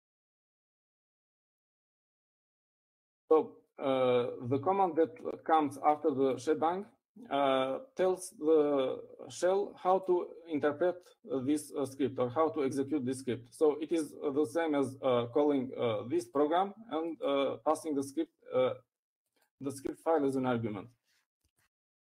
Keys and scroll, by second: 0.4-4.2 typing.